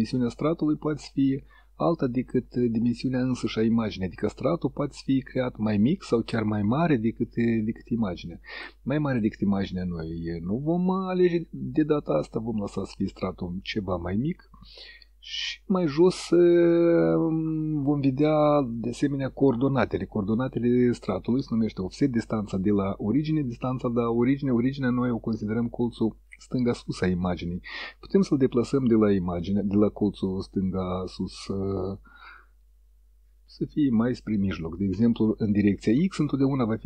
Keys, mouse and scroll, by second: 1.0 click, 2.4 click, 6.4 click, 8.6 click, 13.8 click, 28.0-29.8 drag, 31.3 click, 32.7 click.